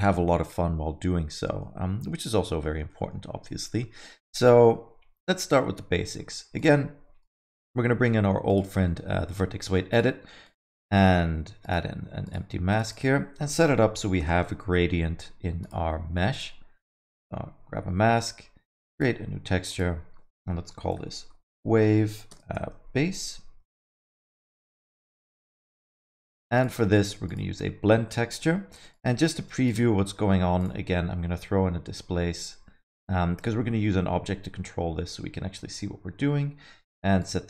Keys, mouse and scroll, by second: 1.3 alt+middle click, 2.2 scroll up 1, 2.4 middle click, 2.9 middle click, 3.7 alt+middle click, 5.4 middle click, 6.5 click, 7.2 click, 8.8 middle click, 9.9 click, 10.4 click, 11.6 click, 12.2 click, 12.7 click, 12.8 click, 15.6 click, 16.3 click, 18.9 click, 19.7 click, 25.6 click, 26.5 click, 28.0 middle click, 28.9 click, 29.6 click, 37.2 click.